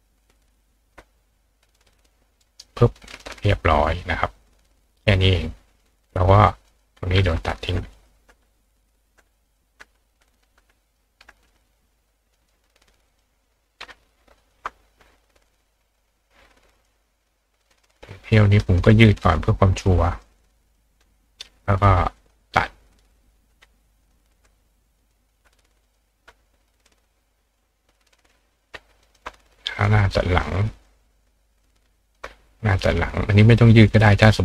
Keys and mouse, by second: 0.9-2.6 ctrl+drag, 2.4 ctrl+right click, 3.1 ctrl+click, 4.7 click, 6.7 click, 7.9 click, 8.8 click, 9.4 click, 10.2 click, 10.8 click, 11.5 click, 12.3 click, 13.1 click, 14.4 shift+click, 15.5-16.8 drag, 17.6 click, 18.7 shift+click, 19.9 click, 20.5 click, 22.2 click, 24.0 click, 25.0 click, 25.8 click, 26.9-28.3 drag, 29.0 shift+click, 29.8 click, 30.8-31.6 drag, 32.0 shift+click, 33.3 click.